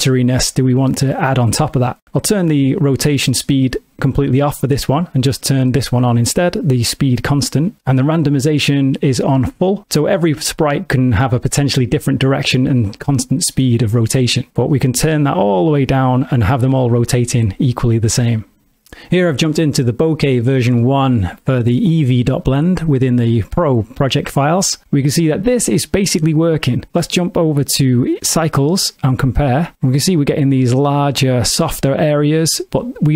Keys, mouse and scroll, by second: 3.6 click, 6.2 click, 14.5 click, 24.8 click, 27.4 click, 28.1 click.